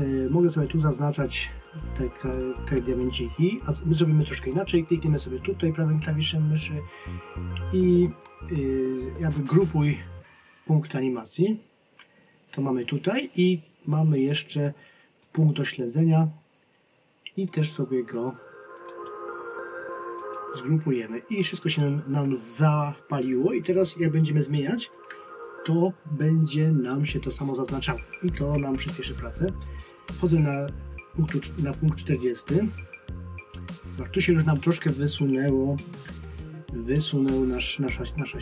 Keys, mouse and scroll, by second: 0.3 click, 9.5 click, 15.2 click, 18.9 right click, 30.3 click, 36.8 ctrl+scroll down 1.